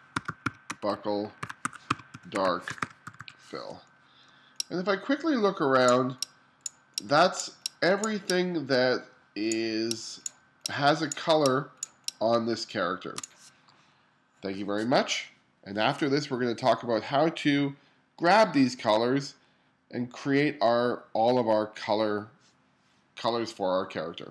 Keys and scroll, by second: 0.0-3.1 typing, 4.3 space.